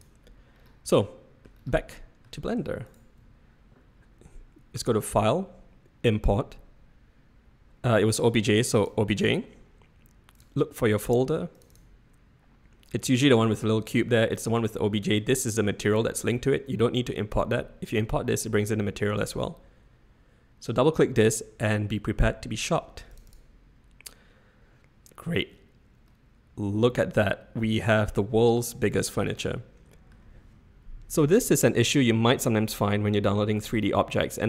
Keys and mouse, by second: 0.8-1.4 middle drag, 1.9-2.2 middle drag, 2.8 shift+click, 4.9-9.2 drag, 26.0-29.7 middle drag, 29.7 click.